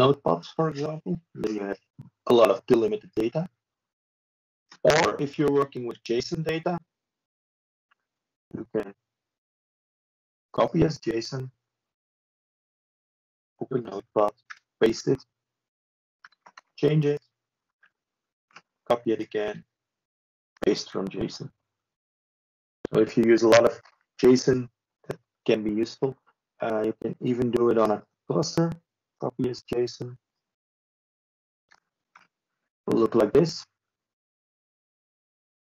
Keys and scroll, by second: 1.8 ctrl+3, 22.4 ctrl+space, 23.6 ctrl+4, 30.2 ctrl+space, 31.1 ctrl+4.